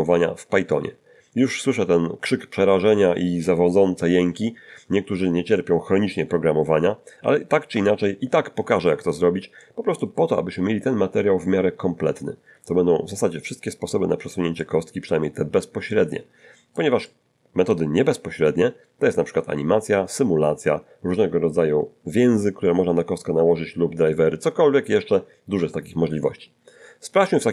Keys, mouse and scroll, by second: 4.2 1, 4.4 1, 7.1 t, 7.7 n, 9.1 scroll up 2, 9.6 shift+middle click, 13.6-14.2 scroll down 2, 14.6-16.9 middle drag, 17.0 middle click.